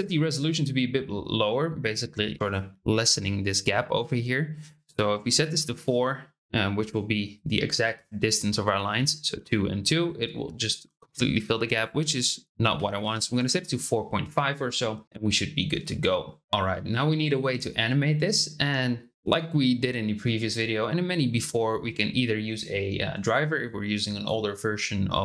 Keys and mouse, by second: 4.6-6.1 drag, 11.7-13.8 drag.